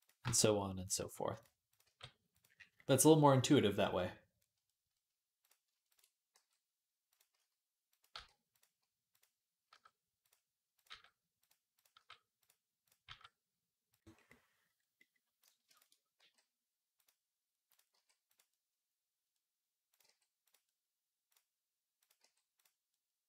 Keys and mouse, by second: 0.8 g, 1.3-5.5 middle drag, 1.5 click, 1.6 g, 5.2 click, 5.7 ctrl+click, 6.1 g, 7.1 s, 7.9 g, 9.0-10.1 drag, 9.5 g, 10.1-12.7 middle drag, 10.6 click, 10.7 g, 11.7 g, 12.7-16.0 drag, 12.9 g, 16.0-19.8 middle drag, 16.0 g, 17.7 g, 19.8 g, 22.0 g.